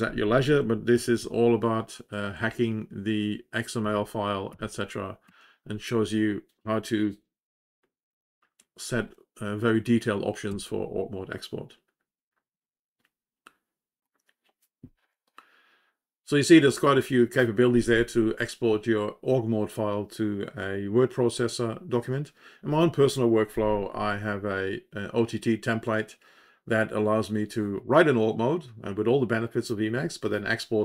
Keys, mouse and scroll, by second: 2.3 Page_Down, 3.8 Page_Down, 4.4 Page_Down, 5.2 Page_Down, 10.4 Page_Down.